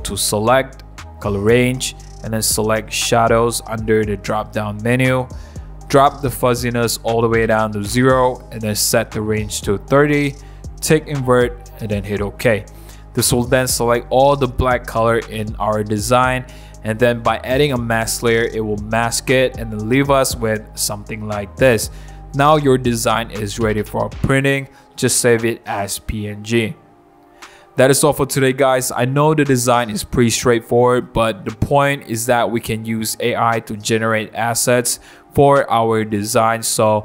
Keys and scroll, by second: 18.9 super+1, 22.0 super+=, 22.7 super+0, 23.0 super+-, 26.7 super+1, 28.0 super+0, 28.2 super+-, 32.5 super+1.